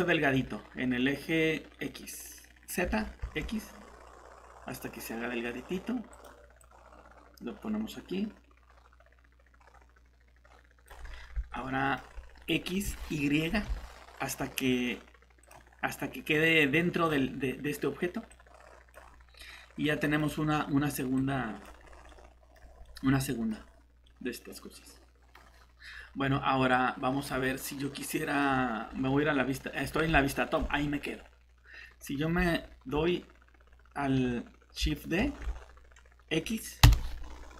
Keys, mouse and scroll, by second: 2.8 s, 3.4 x, 6.1 click, 11.0 scroll up 1, 11.5 middle click, 11.8-13.4 typing, 15.4 click, 19.4 middle click, 21.2 click, 21.8 scroll up 1, 22.1 middle click, 22.6 scroll down 1, 22.8 middle click, 25.5 scroll down 1, 26.7 click, 27.5 middle click, 28.9-29.7 scroll down 1, 29.7-30.1 scroll up 1, 30.2 middle click, 30.6-32.4 scroll up 1, 36.8 x.